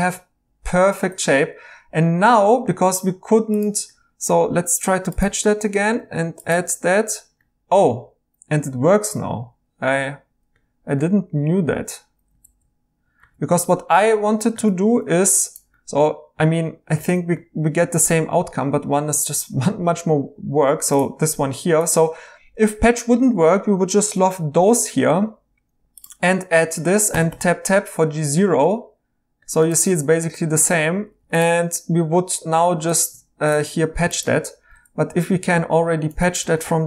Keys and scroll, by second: 1.1 2, 8.7 e, 12.4-14.7 typing, 17.0 e, 24.0 i, 27.1 Tab, 27.3 Tab, 34.9-35.7 typing, 36.4 ctrl+z, 36.6 ctrl+z.